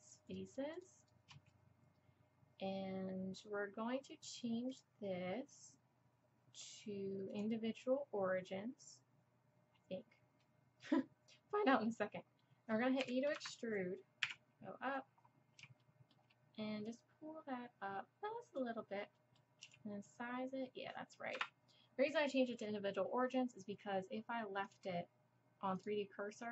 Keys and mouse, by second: 0.7-2.9 drag, 4.7-6.6 drag, 12.4 click, 12.5 middle click, 13.0 e, 13.4 click, 14.2 KP_1, 16.9-19.1 drag, 19.2 click, 19.3-20.0 middle drag, 19.6 s, 23.2-24.7 middle drag, 24.7-26.5 drag.